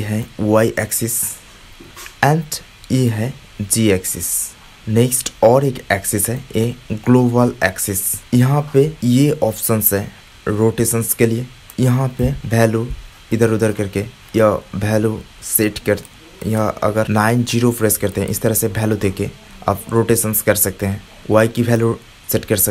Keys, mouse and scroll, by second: 0.2-1.6 drag, 3.0-4.8 drag, 6.5-8.2 drag, 8.2 middle click, 12.2-14.7 drag, 15.0 click, 16.5-17.6 drag, 18.2-21.0 middle drag, 21.0 click, 22.3-22.7 drag.